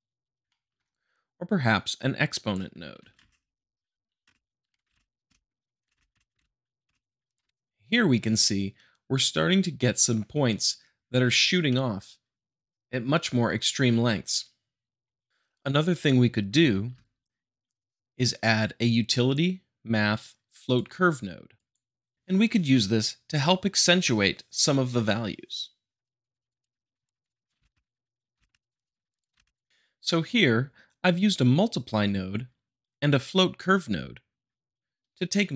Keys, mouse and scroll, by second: 0.4-1.4 shift+middle drag, 1.9 click, 2.9 shift+Left, 3.1 space, 4.9 shift+Left, 4.9 space, 5.3 space, 5.9 space, 6.4 shift+Left, 6.8 space, 7.3 click, 11.6-12.6 middle drag, 15.1 middle click, 16.7 shift+a, 20.6-21.6 drag, 26.0 click, 26.3 click, 26.6 click, 27.0 click, 27.3 click, 27.6 shift+Left, 27.8 space, 28.0 click, 28.5 space, 28.6 click, 29.1 click, 29.3 click, 29.3 shift+Left, 29.4 space, 29.5 click, 29.7-30.2 shift+middle drag.